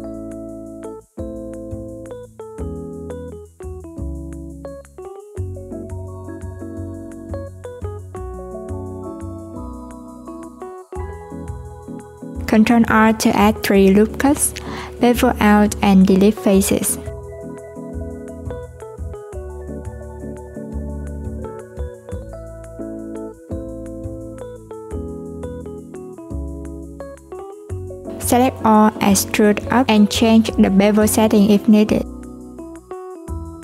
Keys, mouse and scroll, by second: 0.0 right click, 1.5 click, 5.9 click, 12.4 Tab, 14.1 ctrl+r, 18.3 /, 20.3 ctrl+b, 32.3-33.6 drag.